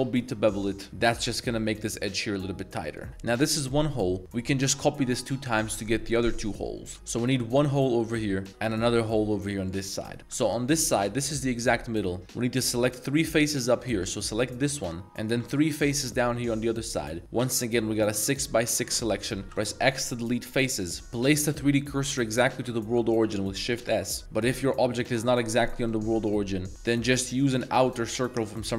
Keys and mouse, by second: 0.9 ctrl+z, 1.2 ctrl+b, 3.1 Tab, 3.8-4.2 middle drag, 6.8-7.1 drag, 7.1 3, 7.4 a, 7.5 a, 7.6 b, 8.7 a, 8.8 b, 9.9 shift+middle drag, 10.3 alt+2, 11.5 shift+middle drag, 14.4 3, 14.6 click, 15.7 ctrl+shift+click, 19.0 shift+click, 19.1 shift+middle drag, 19.4 x, 21.0 Tab, 21.5 shift+s, 24.2 Tab, 24.5 g, 27.0 Tab, 27.0 middle click, 27.7 1, 28.1 alt+click.